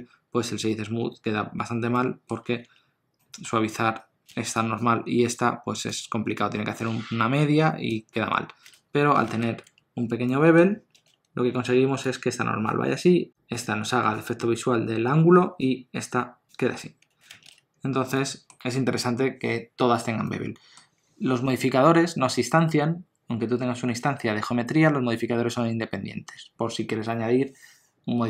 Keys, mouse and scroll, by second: 2.6 Tab, 3.2 middle click, 9.6 Tab, 10.2 middle click, 17.8 scroll down 1, 18.1 middle click.